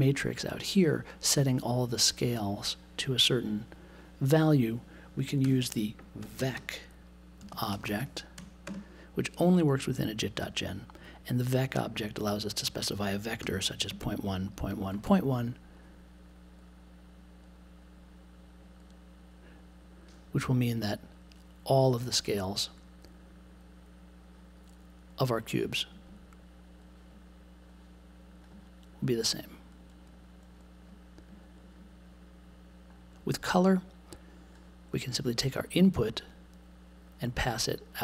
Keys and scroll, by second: 5.4-8.6 typing, 13.4-14.9 typing.